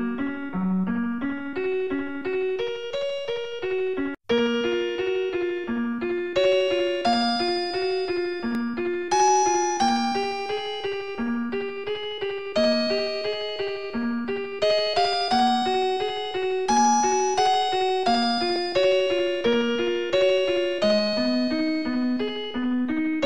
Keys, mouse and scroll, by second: 1.6 shift+right click, 2.2 middle click, 3.1-6.7 typing, 8.3 2, 11.6 Return, 15.3 click, 18.3 click, 21.9 scroll up 1, 22.4 s.